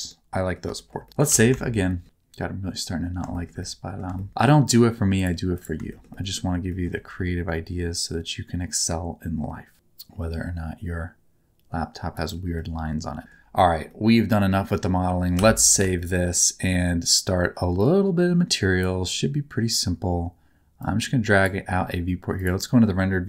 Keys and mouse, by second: 0.1 middle click, 0.7 shift+middle click, 1.0 middle click, 1.3 ctrl+s, 1.6 shift+middle click, 3.3 shift+middle click, 3.6 middle click, 4.1 shift+middle click, 4.6 middle click, 5.1 click, 5.9 shift+middle click, 6.1 middle click, 6.7 middle click, 7.2 r, 12.5 middle click, 13.9 middle click, 15.4 ctrl+s, 15.9 shift+middle click, 17.9 click, 20.8 click.